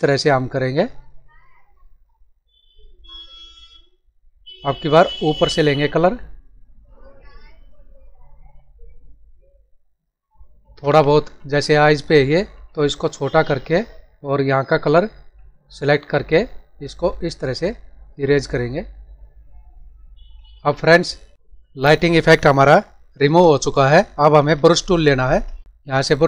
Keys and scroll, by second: 10.9 ctrl+=, 20.5 ctrl+-, 24.1 ctrl+=, 25.0 ctrl+-, 25.6 ctrl+alt+z.